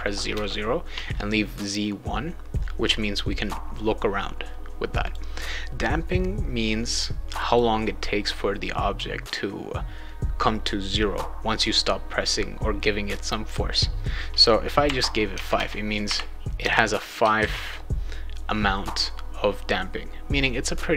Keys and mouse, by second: 5.0 click, 7.3 click, 7.5 click, 15.3 Tab, 15.5 Tab, 17.4 ctrl+s.